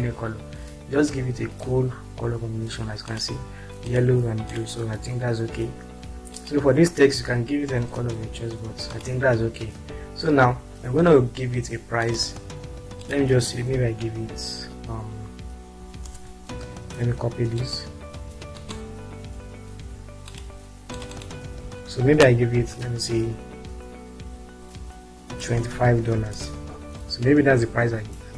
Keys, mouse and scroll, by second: 3.4 click, 4.2 click, 5.3 click, 6.4 click, 16.0 ctrl+space, 22.6 ctrl+a, 23.3 shift+4, 25.4-25.9 typing, 26.4 ctrl+space.